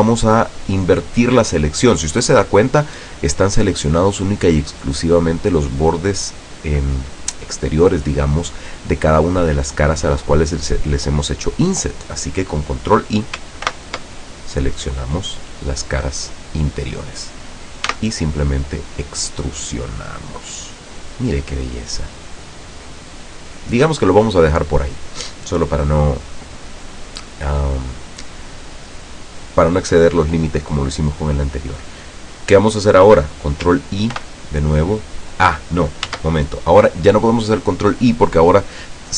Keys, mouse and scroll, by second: 13.7 ctrl+i, 18.0 e, 24.4 click, 34.2 ctrl+i, 36.2 ctrl+z.